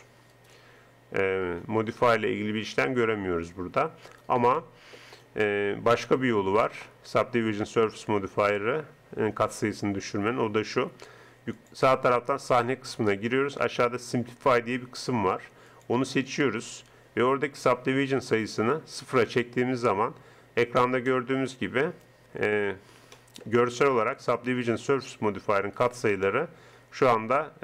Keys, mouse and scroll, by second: 0.4-2.1 right drag, 4.3 click, 4.7 middle click, 5.0-6.1 right drag, 12.7-15.0 drag, 16.3-18.1 drag, 23.8-25.4 middle drag, 25.8 middle click, 26.7 click, 27.3 right click.